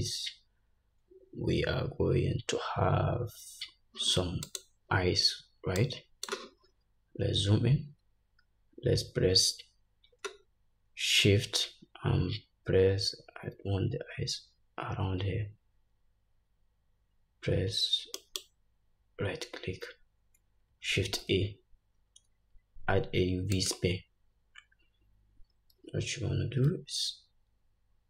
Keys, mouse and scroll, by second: 4.8-6.0 drag, 7.0-8.5 scroll up 1, 18.6 shift+right click, 19.6-28.0 drag, 21.1 shift+a.